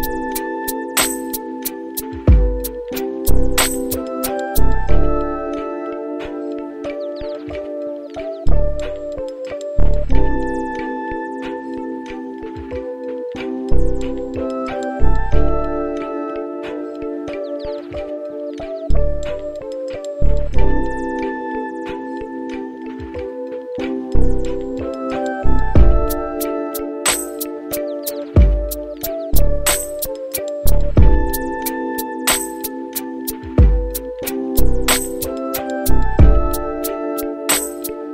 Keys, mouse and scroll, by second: 1.7-6.9 drag, 9.0 click, 15.1 middle click, 16.6 middle click, 17.9 middle click, 19.8-29.6 drag, 31.2 click, 36.6-38.1 drag.